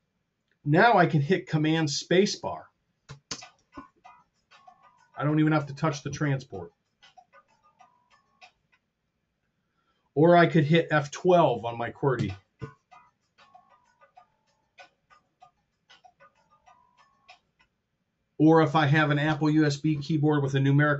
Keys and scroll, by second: 3.2 super+space, 12.1 F12.